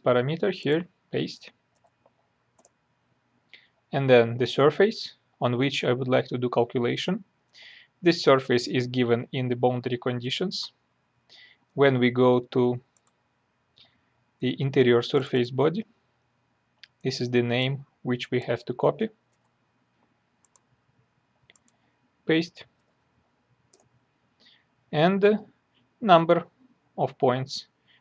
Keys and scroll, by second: 1.7 ctrl+v, 19.3 ctrl+c, 22.7 ctrl+v.